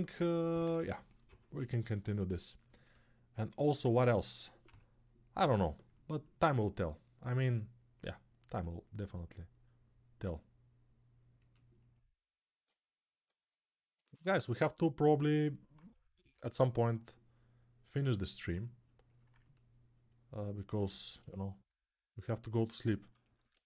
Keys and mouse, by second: 3.8 1, 4.4-5.1 [, 8.2-22.3 ctrl+drag, 22.3-23.6 ctrl+alt+right drag.